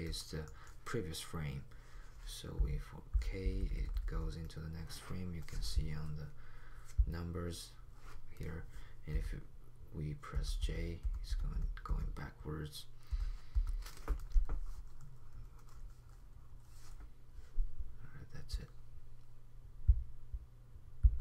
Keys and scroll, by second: 2.5-4.5 typing, 9.1 j, 10.6-14.4 typing.